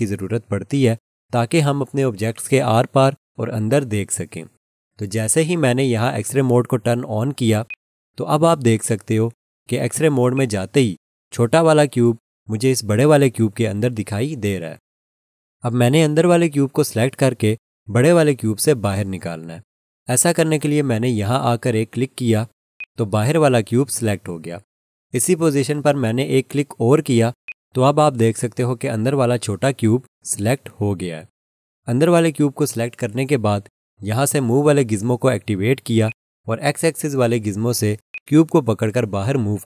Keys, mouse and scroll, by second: 7.7 click, 9.8 click, 10.3 alt+click, 22.8 click, 27.5 click, 36.1 click.